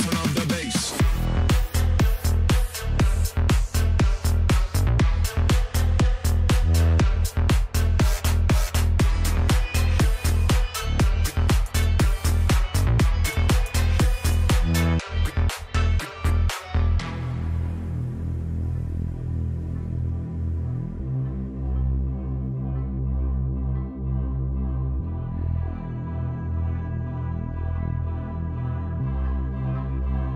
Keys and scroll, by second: 0.0-0.8 typing, 3.5-5.0 typing, 6.5-8.0 typing, 11.7-13.3 typing, 22.2 z, 24.8 p, 26.8 c, 28.9-30.0 typing.